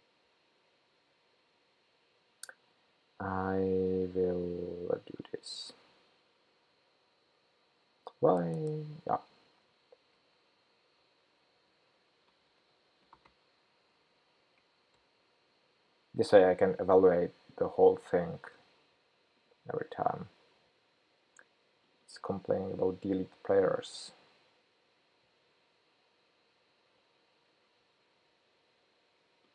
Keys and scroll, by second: 13.8 Escape, 17.1 shift+super+p.